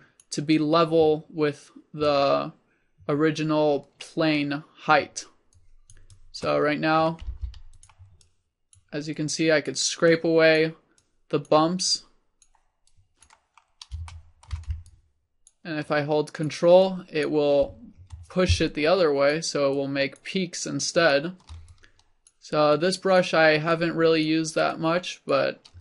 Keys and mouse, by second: 7.0-10.9 drag, 7.4 f, 13.8 click.